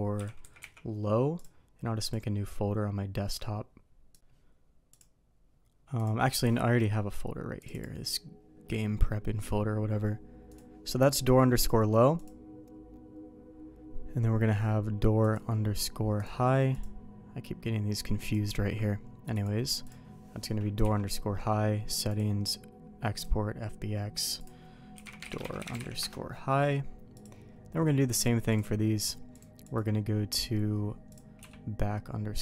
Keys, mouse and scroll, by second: 11.6 click, 12.2 click, 15.3 click, 16.2 click, 19.3 click, 19.8 click, 20.8 q, 29.0 click, 29.3 click, 31.1 click, 31.4 q.